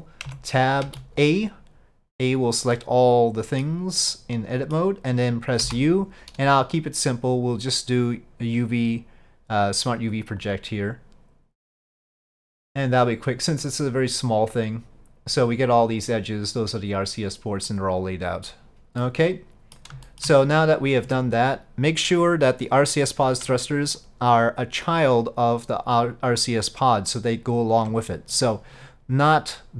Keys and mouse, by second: 17.8-19.1 drag, 19.1 middle click, 20.1 shift+middle click, 21.1 Tab, 22.4-23.6 drag, 24.1-27.9 ctrl+drag, 28.9-29.7 drag.